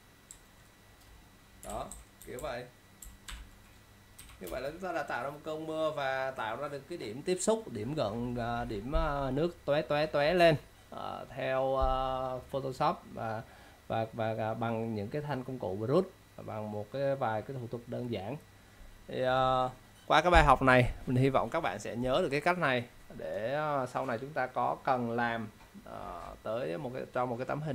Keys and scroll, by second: 1.8 ctrl+-, 2.3 =, 3.4 ctrl+0, 4.1-4.6 typing.